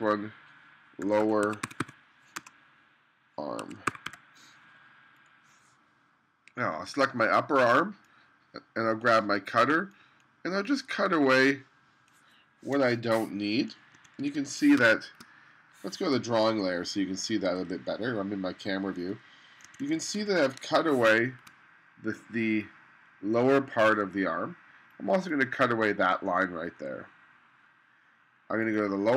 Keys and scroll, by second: 0.9-2.4 typing, 3.4-4.6 typing, 12.9 BackSpace, 14.0 2, 14.8 space, 17.7 1, 19.7 2, 20.7 1, 21.1 space.